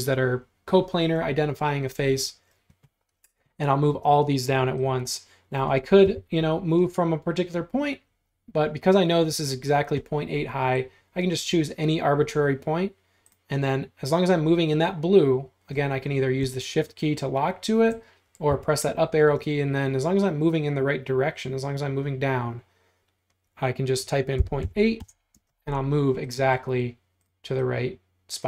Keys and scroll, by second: 6.1 m, 18.5 Up, 24.2-25.4 typing.